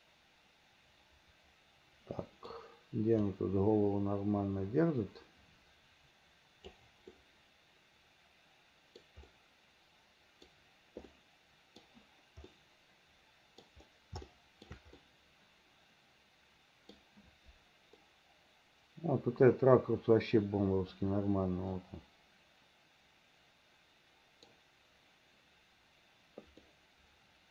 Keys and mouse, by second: 3.4-6.9 middle drag, 7.2-9.1 middle drag, 9.4-10.6 middle drag, 11.2 middle click, 12.6-13.7 middle drag, 14.4 shift+middle click, 15.1-17.0 middle drag, 18.2-24.6 middle drag, 26.7-27.5 middle drag.